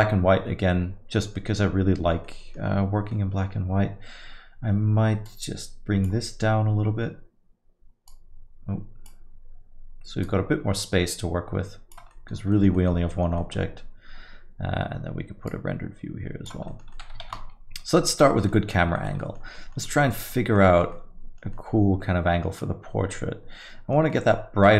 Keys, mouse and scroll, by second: 2.3 middle click, 3.1 middle click, 5.3 click, 8.1 click, 10.2 click.